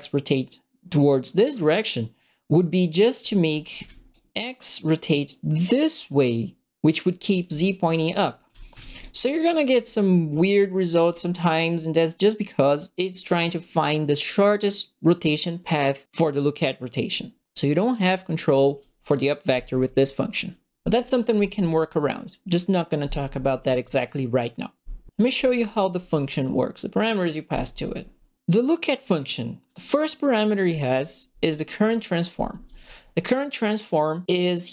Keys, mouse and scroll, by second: 2.9-4.2 typing, 3.0-4.1 right drag, 7.0-8.9 right drag, 7.2-9.6 typing, 9.4-11.6 right drag, 11.0 s, 17.5-18.9 right drag, 17.9 w, 18.7 s, 18.9 click, 29.6 click, 31.8 click, 32.6 click.